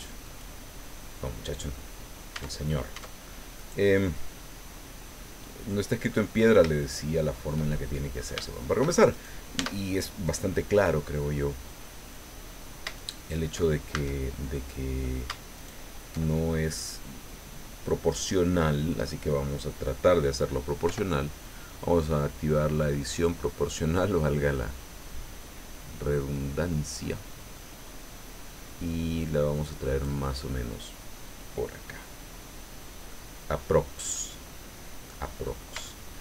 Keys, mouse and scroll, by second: 0.2 click, 0.7-1.2 scroll up 2, 1.5-1.9 scroll down 2, 2.3 Tab, 3.5 right click, 4.0-4.3 scroll down 2, 4.5-6.3 drag, 6.3 scroll up 2, 6.7 shift+middle click, 7.7 shift+click, 8.0 middle click, 9.1 shift+right click, 9.6 shift+Tab, 12.9 alt+shift+right click, 13.9 alt+shift+a, 14.5 click, 15.5 alt+shift+right click, 18.1-19.2 drag, 20.9 o, 23.4 click, 24.3-24.8 scroll down 2, 24.9-25.6 scroll down 4, 26.3 scroll down 2, 33.1-35.2 middle drag, 35.4-35.7 scroll up 2, 35.8 shift+middle click.